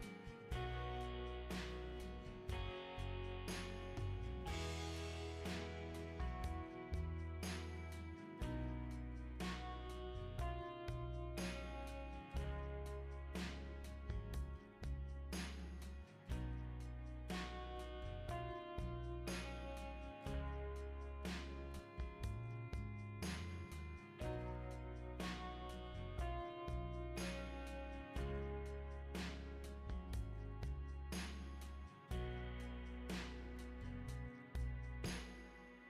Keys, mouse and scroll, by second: 1.6 2, 2.1 ,, 2.6 5, 4.6 click, 6.1 click, 8.2 click, 9.5 click, 10.1 right click, 12.7 click, 13.9 ctrl+click, 17.0 click, 17.8-19.4 typing, 21.6 click, 25.0 click, 28.9-30.2 typing.